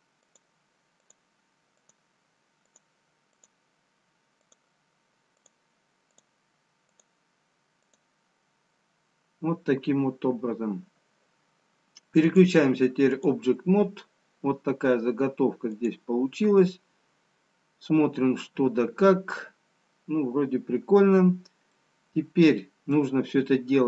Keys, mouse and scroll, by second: 12.4 click, 21.8 middle click.